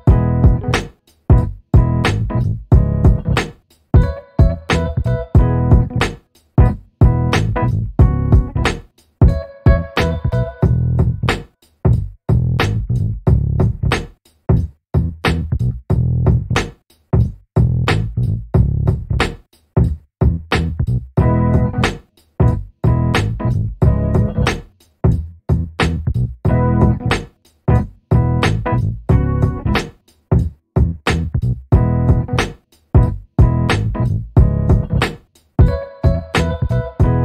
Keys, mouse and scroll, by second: 0.1 click, 1.8 shift+click, 3.1-5.7 drag, 7.7-8.5 shift+drag, 9.5 ctrl+g, 11.5 click, 15.5 click, 16.5 shift+click, 17.8 shift+click, 18.5 click, 19.2 click, 21.6 ctrl+d, 23.3 click, 25.3 click, 26.9 click, 28.7-30.6 ctrl+shift+drag, 33.0 click, 34.6 click.